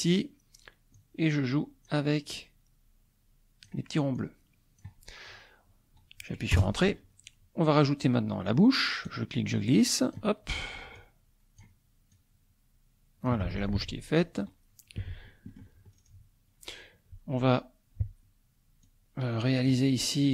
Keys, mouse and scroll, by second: 1.0-2.3 drag, 2.4-3.9 drag, 4.2 click, 6.5 Return, 9.2-10.3 drag, 11.0-12.0 drag, 12.2-13.5 drag, 13.6 scroll down 1, 15.5 middle click, 15.9 scroll down 1, 16.2-18.9 middle drag, 18.9-19.9 drag.